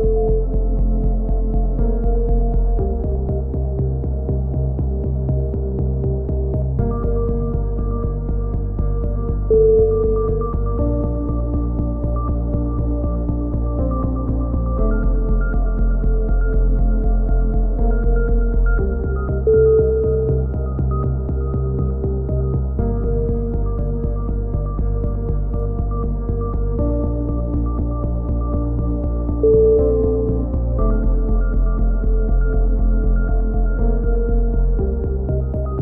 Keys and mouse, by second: 0.2 alt+m, 0.7 a, 0.8 z, 0.9 z, 1.9 alt+m, 1.9 right click, 2.5 s, 2.8 ctrl+z, 3.6 a, 6.0 alt+m, 6.0-7.7 right drag, 7.2 alt+m, 7.7 a, 8.0-8.7 drag, 8.7 c, 11.1 alt+m, 11.1 right click, 11.1 c, 11.7 ctrl+z, 12.0 c, 12.9 click, 13.2 alt+m, 14.0 click, 14.1 alt+m, 14.5 a, 15.2-17.7 drag, 15.6 alt+m, 16.6 alt+m, 17.8 a, 17.9 z, 19.4 middle click.